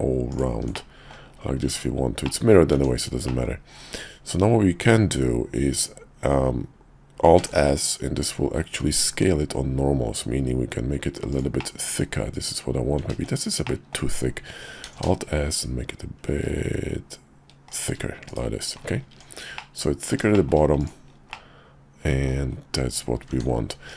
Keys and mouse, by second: 0.3 ctrl+click, 0.7 middle click, 1.6 Tab, 2.3 middle click, 2.7 Tab, 3.2 middle click, 7.4 alt+s, 11.6 middle click, 13.1 ctrl+z, 13.6 click, 14.8 alt+s, 18.2 /, 19.1 Tab, 19.5 middle click, 20.3 shift+click, 20.8 click, 21.3 middle click, 23.3 Tab, 23.8 click.